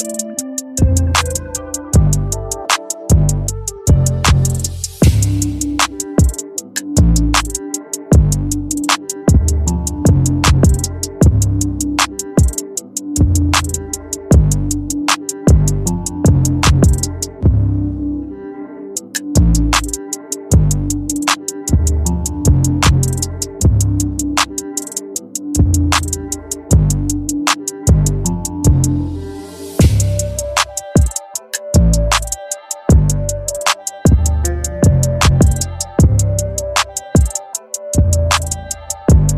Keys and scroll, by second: 8.1 ctrl+t, 25.1 Return, 30.8 ctrl+l.